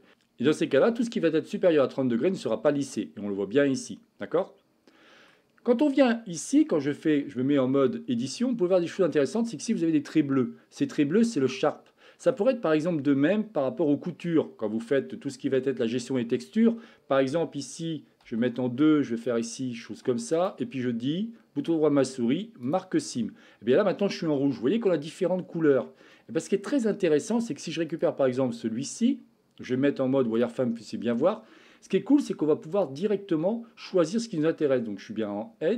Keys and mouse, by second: 2.6-5.4 middle drag, 7.1 Tab, 7.9-9.2 middle drag, 11.5 middle click, 18.2 2, 20.3-22.7 right drag, 23.2-25.0 middle drag, 26.2 middle click, 27.9-29.7 drag, 29.7 z, 32.7-35.1 drag.